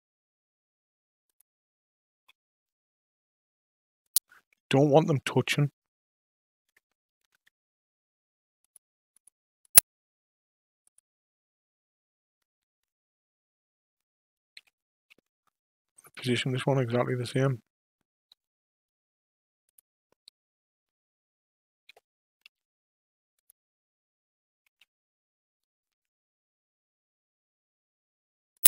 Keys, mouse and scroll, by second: 2.1 s, 7.2 KP_5, 7.3 KP_1, 8.6 click, 9.1 click, 9.6 click, 10.8 click, 12.6 KP_5, 12.8 KP_3, 14.5 g, 17.3 g, 21.8 g, 24.6 s.